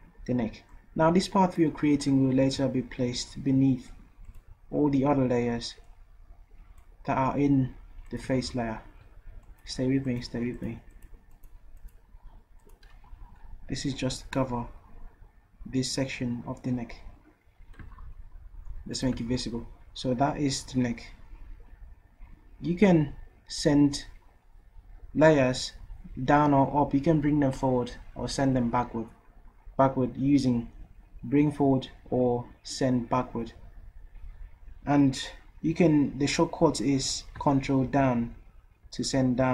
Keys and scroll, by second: 2.4 ctrl+z, 13.0 v, 37.9 ctrl+Down, 38.8 ctrl+Down, 39.4 ctrl+Down.